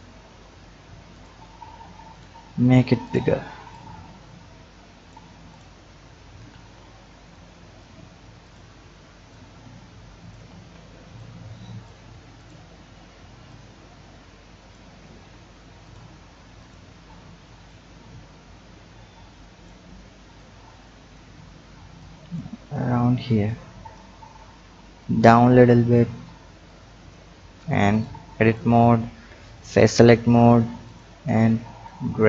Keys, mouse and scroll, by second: 0.1 Tab, 0.4-1.1 scroll down 4, 1.1 click, 2.1 click, 3.0 click, 3.7-5.5 drag, 6.5 ctrl+z, 7.3 click, 8.4 click, 9.3 click, 10.4 ctrl+z, 11.2-12.5 drag, 13.5-15.0 drag, 15.0 Tab, 15.4-15.8 scroll up 1, 15.8 drag, 16.6 click, 17.6-20.4 drag, 22.0-22.6 drag, 22.6-23.4 scroll up 1, 23.4 click, 25.0-26.7 drag, 27.3 Tab, 27.9 click, 28.4 click, 29.4 click, 30.8 click, 31.8-32.2 drag.